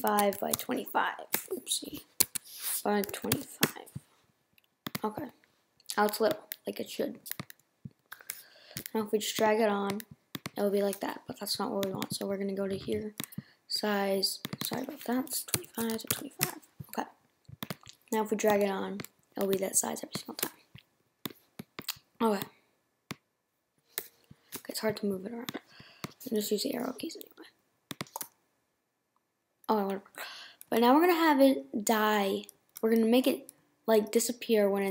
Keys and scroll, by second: 16.8 shift+Return.